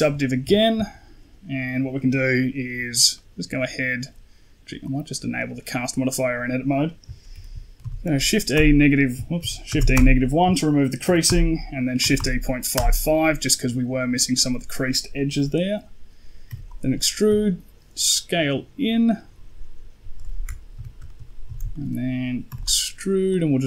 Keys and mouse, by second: 0.3 Tab, 0.7 shift+middle click, 3.0 middle click, 4.7 click, 5.2 click, 5.9 middle click, 7.2 shift+e, 9.3 shift+e, 10.9 shift+e, 15.5 middle click, 16.3 e, 17.1 s, 20.6 KP_1, 20.9 shift+middle click, 21.3 z, 21.6 shift+middle click, 22.4 e, 23.2-23.6 drag.